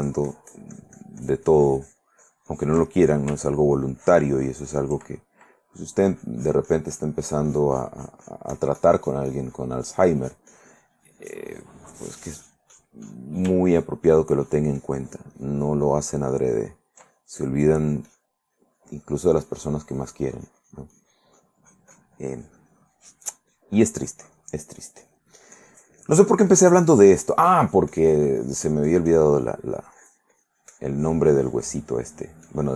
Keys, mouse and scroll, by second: 3.0 ctrl+click, 4.0-5.4 ctrl+drag, 6.4-13.2 drag, 13.6 ctrl+click, 15.8-17.2 ctrl+drag, 17.5-21.5 ctrl+drag, 21.8-31.7 ctrl+drag, 31.9 middle click, 32.6 click.